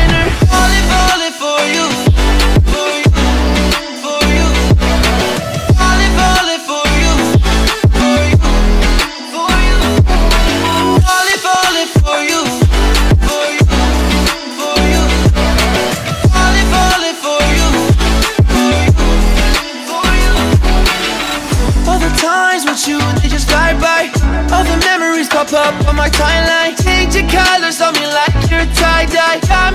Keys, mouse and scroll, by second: 1.0 Return, 2.0 alt+scroll up 1, 4.5-7.0 drag, 10.7 click, 11.9-20.0 drag, 20.1-26.5 drag, 27.2 alt+scroll down 1, 27.2 alt+scroll up 1, 29.3 alt+Num_Lock, 29.3 alt+scroll up 1, 29.5 alt+scroll down 1.